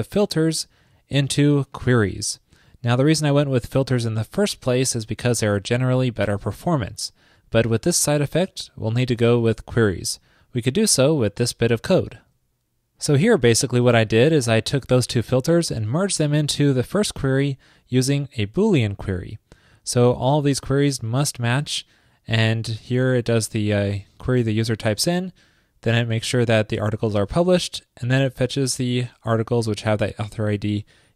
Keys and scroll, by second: 12.2 super+v.